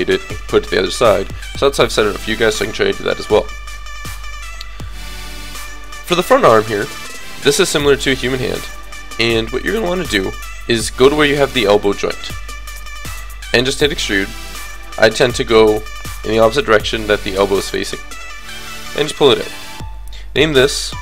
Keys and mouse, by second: 3.8 KP_1, 4.5 KP_3, 5.0 KP_5, 9.7-10.9 drag, 12.7 KP_3, 13.6 e, 19.5-21.0 drag.